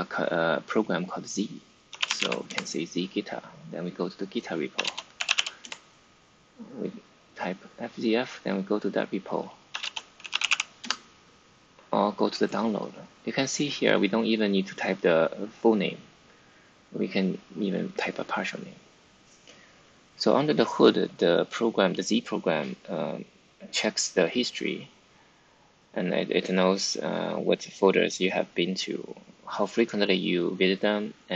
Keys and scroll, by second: 0.2-2.6 typing, 4.4-5.8 typing, 7.3-8.1 typing, 9.4-10.9 typing.